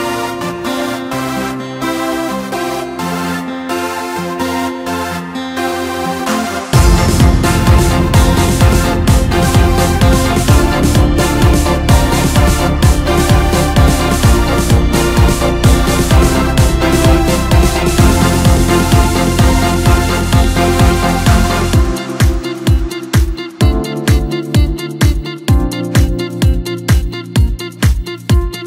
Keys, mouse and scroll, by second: 1.6 alt+h, 2.2 Tab, 2.7-4.7 middle drag, 4.7 KP_1, 6.6-7.0 scroll up 1, 7.0 scroll down 2, 7.2-9.2 middle drag, 9.2-10.2 scroll up 3, 10.2-10.5 scroll up 3, 10.5-10.8 scroll down 2, 10.8-11.7 middle drag, 11.7-12.3 scroll up 1, 12.3 Tab, 12.9-13.9 middle drag, 13.9 click, 15.1 click, 15.8-18.8 middle drag, 20.1 2, 21.0 click, 21.2 click, 21.7 scroll down 2, 22.0 middle click, 22.7-24.7 right drag, 24.7-26.7 middle drag, 26.7 click, 26.8 click, 27.4 middle click, 28.0-28.6 scroll up 2.